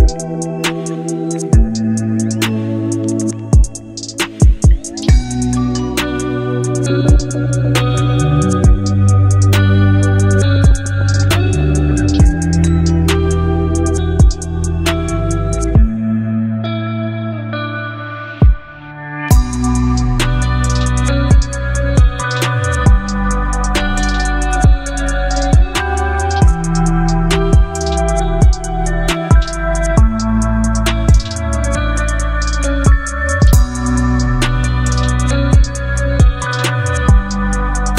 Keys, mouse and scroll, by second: 7.5 click, 9.6-11.5 scroll down 1, 11.7 click, 15.4-19.1 drag, 25.2 ctrl+Num_Lock, 25.5 ctrl+j, 27.5 click, 30.6 b, 32.1 click, 33.5 alt+scroll up 1, 34.8 space, 35.3 click, 35.3 space, 36.1-37.9 drag.